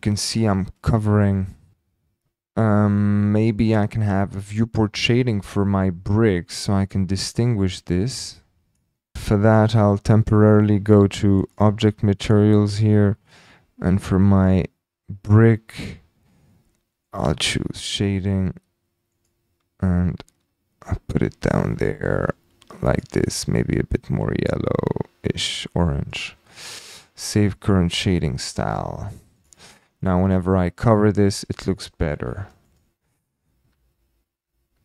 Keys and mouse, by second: 1.4 middle click, 3.6 click, 8.1 click, 8.3 middle click, 17.1-18.0 middle drag, 19.1 middle click, 28.7-29.1 shift+drag, 29.4 drag, 30.0 shift+click, 30.9 click, 32.4 shift+d, 32.7 click, 33.5-34.8 typing.